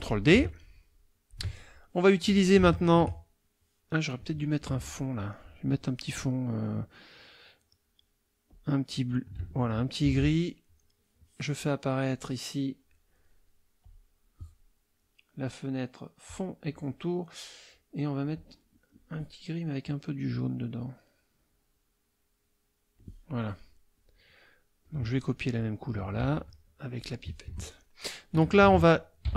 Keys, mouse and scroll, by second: 0.1-1.5 ctrl+drag, 4.7 F2, 4.8 click, 8.5 click, 10.0 ctrl+shift+f, 12.1 click, 13.8 click, 16.2-16.8 drag, 18.3 click, 19.8-23.2 drag, 23.3 click, 24.1 click, 24.8 click, 26.2 F7, 27.0 click, 27.5 F1.